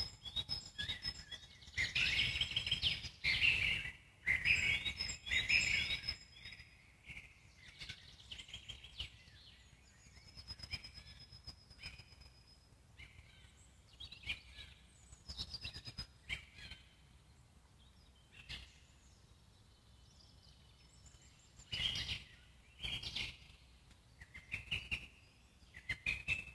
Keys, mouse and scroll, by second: 0.2 s, 2.1-5.9 alt+middle drag, 10.0 alt+middle click, 10.7 click, 11.3-13.1 alt+middle drag, 13.1 shift+click, 13.5 alt+middle click, 14.4 shift+click, 14.7 alt+middle click, 15.5 shift+click, 15.9 alt+middle click, 16.4 shift+click, 16.9-18.3 alt+middle drag, 18.3 g, 19.9-21.0 alt+middle drag, 21.0 click, 22.3 click, 23.5-25.6 alt+middle drag.